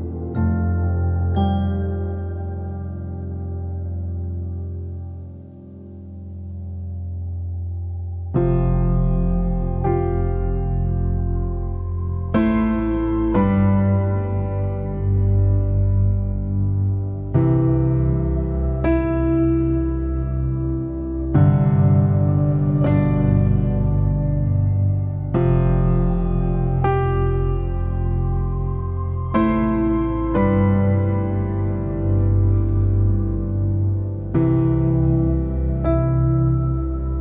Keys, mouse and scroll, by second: 1.3-9.1 drag, 10.1 click, 11.7-13.4 drag, 13.4 f, 15.8 f, 17.7 f, 20.6-21.9 drag, 21.9 f, 24.1 f, 26.0-31.4 drag, 31.4 middle click, 32.1 scroll up 2, 32.6 shift+middle click, 33.5 scroll up 1, 33.7-35.7 shift+middle drag, 35.7 click, 35.9 Tab, 36.2 middle click, 36.8 Tab, 37.1 middle click.